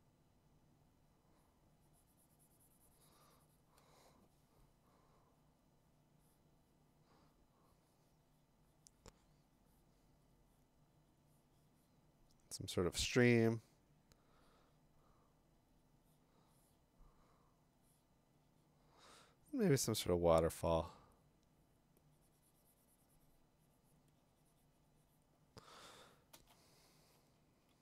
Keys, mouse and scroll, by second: 26.4-27.2 m, 27.3 m, 27.6-27.8 click.